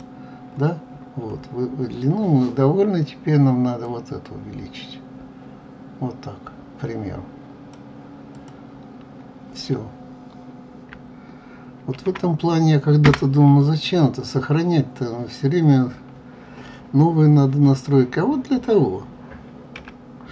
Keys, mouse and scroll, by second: 0.9-1.4 scroll down 10, 3.9-6.9 drag, 8.3 click, 11.9 shift+s, 13.8 click.